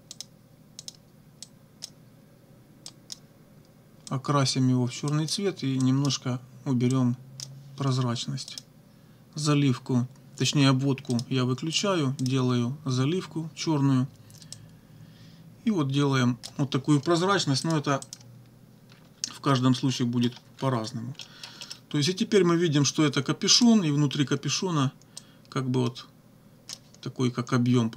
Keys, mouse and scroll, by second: 0.2 click, 0.8 click, 1.4 click, 2.9 click, 4.1 click, 5.1 click, 5.8 click, 7.0 click, 8.5 click, 11.2 click, 11.8 click, 12.2 click, 14.6-16.6 drag, 17.7 click, 18.0 click, 18.9 -, 20.0 click, 20.5 -, 21.2 click, 23.6 click, 25.2-26.9 drag.